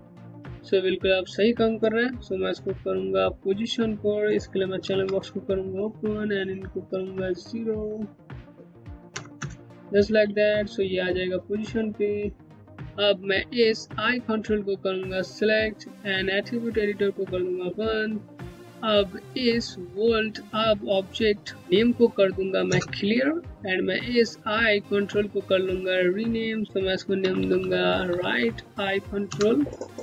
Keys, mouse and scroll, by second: 4.2 click, 4.4 alt+c, 5.7 click, 8.7 KP_0, 9.0 KP_Enter, 12.0 KP_Enter, 13.7 click, 16.7 click, 22.2 click, 23.4-24.8 scroll down 1, 24.8 click, 26.6 Left, 28.9 BackSpace, 29.8 r.